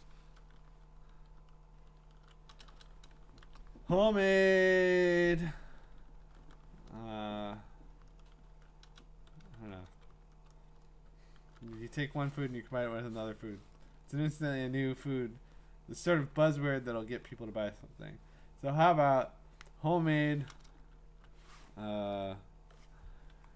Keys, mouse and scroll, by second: 2.2-2.7 typing, 8.9 BackSpace.